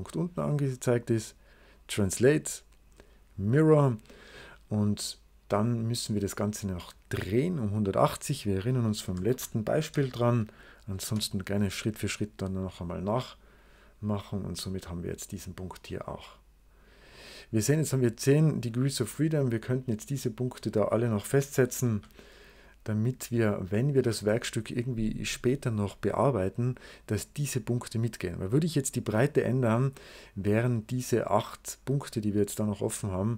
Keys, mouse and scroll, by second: 1.7 click, 3.3 click, 7.9 click, 8.7-9.8 typing, 10.9 Return, 12.9 click, 16.9 click, 19.6 click, 20.4 click, 21.2 click, 21.8 0, 23.2 click, 23.7 click, 23.9 o.